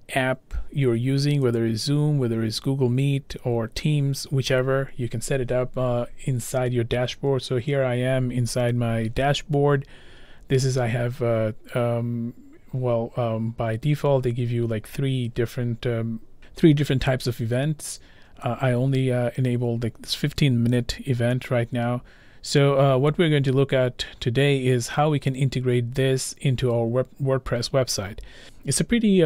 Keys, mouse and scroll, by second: 2.6 click.